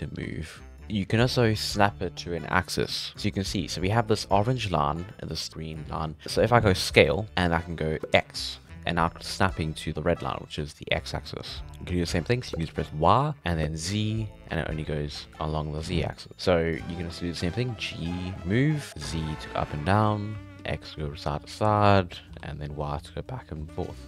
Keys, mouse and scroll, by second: 3.5-5.5 scroll down 2, 7.0 s, 16.9-17.5 scroll down 1, 17.5 scroll up 1, 17.7 g.